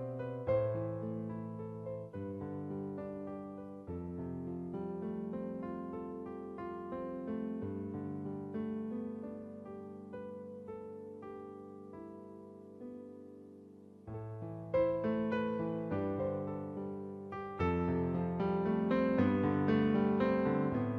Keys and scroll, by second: 0.9 space, 1.9 space, 6.1 space, 8.5 space, 9.6 space, 10.7 space, 14.6 space, 16.0 space.